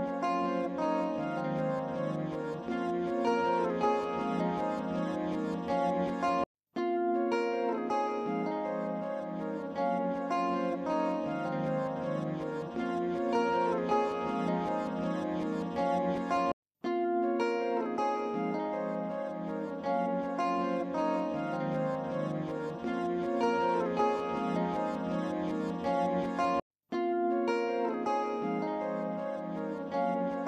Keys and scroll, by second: 10.6 ctrl+z.